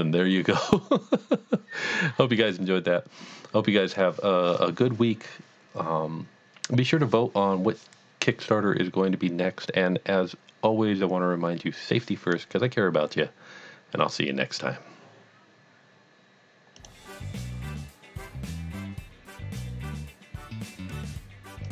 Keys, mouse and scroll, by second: 16.8 click.